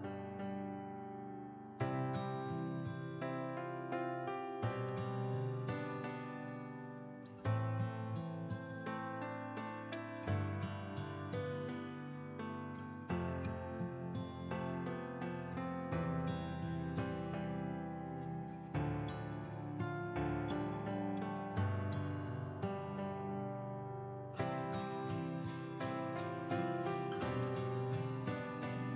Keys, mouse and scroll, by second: 16.4-16.8 ctrl+scroll up 1, 17.1 click, 18.5 ctrl+click, 20.5-28.9 drag.